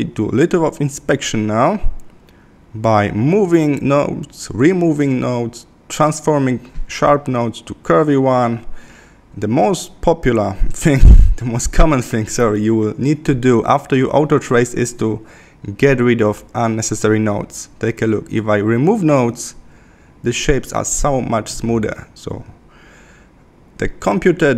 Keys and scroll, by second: 2.4 Left, 11.1 Left, 15.6 Left, 24.1 Left.